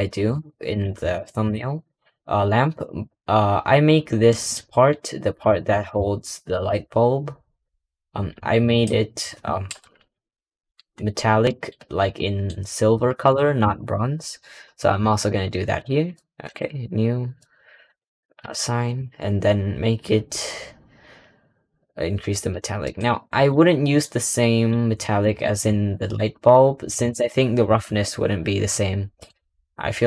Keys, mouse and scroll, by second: 0.2 Tab, 0.6 click, 1.0-1.4 shift+middle drag, 1.4 scroll up 2, 1.6-2.2 scroll down 9, 2.2-3.3 scroll up 11, 3.3 scroll down 2, 4.0-4.7 scroll down 4, 4.2 middle drag, 4.7 Tab, 5.6 3, 6.4 click, 8.5 alt+click, 9.5 ctrl+KP_Add, 10.0 ctrl+KP_Add, 10.1 ctrl+KP_Add, 11.1 scroll down 1, 11.3 middle click, 11.6-12.0 scroll up 3, 12.0 middle click, 12.4-13.2 scroll down 1, 13.2 ctrl+KP_Add, 14.6-15.7 scroll up 14, 16.3-18.8 drag, 18.8-22.4 scroll down 9, 22.4 click, 23.1 middle click, 23.5 scroll up 4, 23.9 middle click, 24.6-25.1 scroll down 1, 25.1 middle click, 25.3-28.3 scroll down 1, 29.1-30.0 drag.